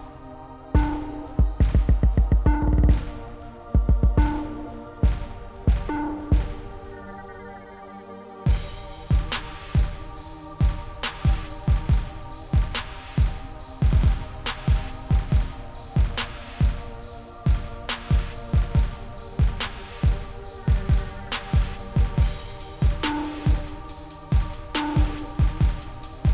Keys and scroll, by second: 0.3 1, 2.0 0, 4.9 0, 6.6 0, 7.2 0, 10.8 0, 19.3-20.7 typing, 24.3-26.2 typing.